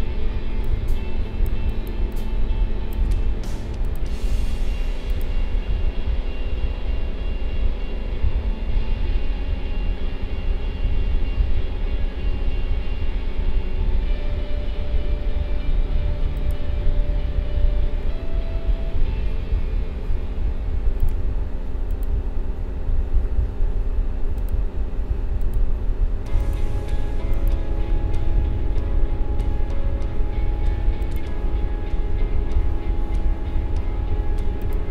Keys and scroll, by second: 0.3 space.